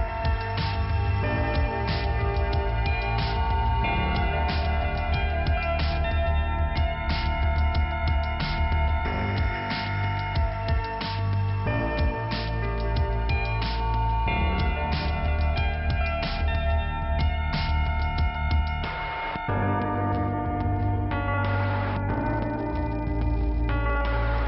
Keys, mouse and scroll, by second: 2.6 click, 5.4 click, 7.4 click, 8.4 scroll down 1, 14.5-15.8 scroll down 2, 17.3 click, 18.6 scroll up 1, 20.6-21.6 scroll up 1, 21.6 click, 21.7 click, 23.6-24.4 scroll up 2.